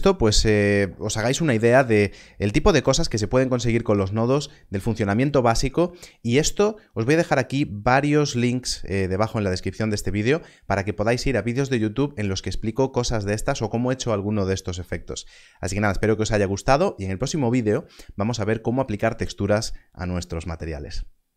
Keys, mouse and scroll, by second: 0.2 space.